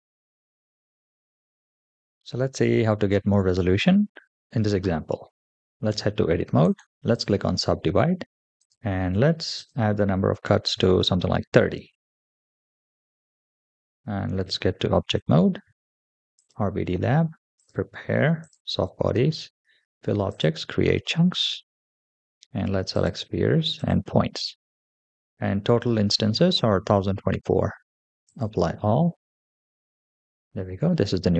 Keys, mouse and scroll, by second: 5.7 Tab, 6.4 right click, 8.4 click, 9.4-11.0 drag, 12.7-13.2 middle drag, 14.2 Tab, 16.2 click, 17.4 click, 18.2 click, 18.8-20.1 scroll down 2, 20.1 click, 20.7-21.3 scroll down 3, 21.4-21.9 scroll down 1, 22.8 click, 23.6 click, 24.4-26.7 scroll down 2, 28.1 click, 30.2-31.1 scroll up 1.